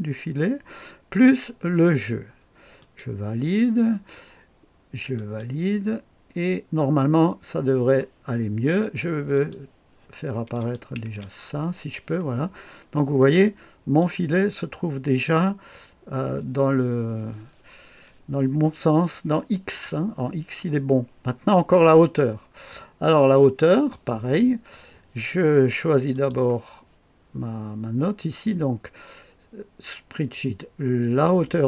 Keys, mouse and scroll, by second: 2.8 click, 5.2 click, 9.3 click, 10.5 click, 11.1 space, 12.7-13.5 scroll up 1, 13.5-14.6 right drag, 22.2-23.0 scroll down 1, 23.0-24.4 right drag, 26.1 click.